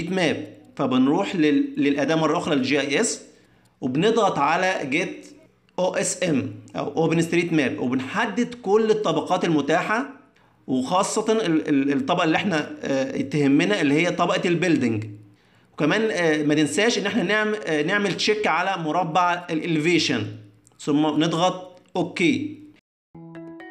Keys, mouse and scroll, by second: 0.0 click, 0.3 click.